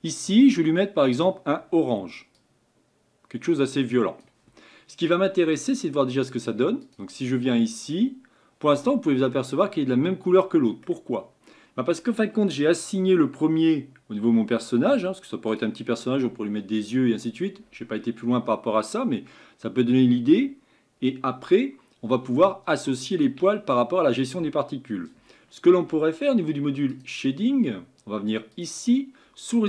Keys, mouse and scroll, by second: 1.1 click, 6.8 click, 7.5-7.9 scroll up 5, 8.9 scroll down 2, 9.3-12.4 middle drag, 15.5 click, 23.1 click, 26.9 click, 28.6 click.